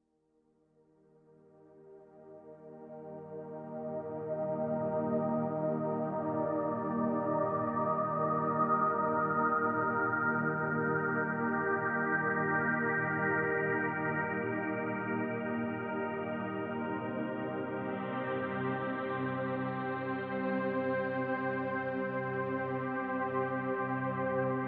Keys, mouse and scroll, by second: 0.6 f, 1.2-4.8 drag, 4.7 scroll down 2, 4.8-6.5 middle drag, 5.2 scroll up 2, 6.5-9.3 drag, 9.3-10.6 shift+middle drag, 9.9-10.6 scroll up 1, 10.6-18.1 drag, 17.9 scroll down 1, 18.1-21.4 middle drag, 18.5 scroll down 1, 19.0 scroll up 1, 19.6 scroll up 1, 21.0 f, 21.6-24.6 drag.